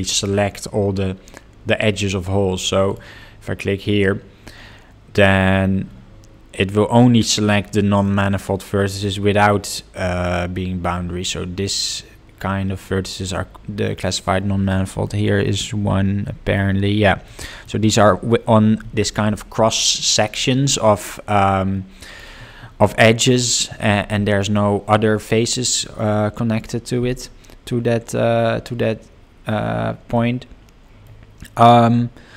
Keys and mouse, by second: 5.3 click, 8.2-9.5 middle drag, 15.0-16.5 ctrl+middle drag, 17.2 ctrl+middle click, 30.1 middle click.